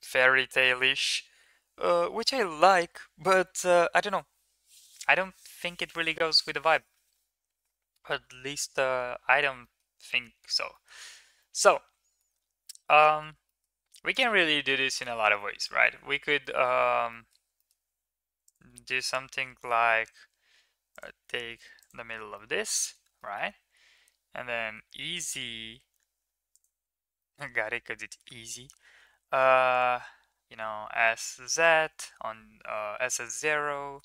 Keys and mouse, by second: 9.4 shift+middle click, 9.9 middle click, 10.5 shift+middle drag, 11.2-12.0 middle drag, 12.5-13.1 middle drag, 13.3 shift+middle drag, 14.0 click, 14.3 Tab, 14.7-15.2 middle drag, 15.4 shift+middle click, 15.9 1, 16.2 middle drag, 16.9 middle drag, 17.4 shift+middle click, 18.3 drag, 18.6 middle click, 19.6 middle click, 21.6 ctrl+click, 22.3-22.8 middle drag, 23.0 middle click, 24.6 e, 27.2 middle click, 28.9 s, 31.0 middle click, 33.1 s.